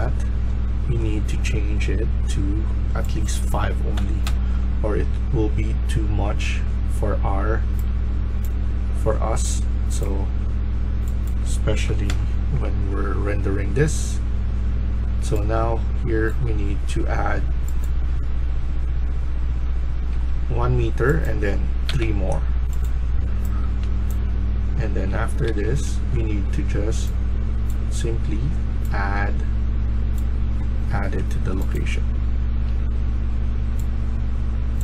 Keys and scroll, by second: 3.8 5, 4.2 Return, 7.5 s, 8.4 s, 11.8 5, 12.0 Return, 20.0 1, 21.8 3, 23.5 s, 24.8-25.9 typing.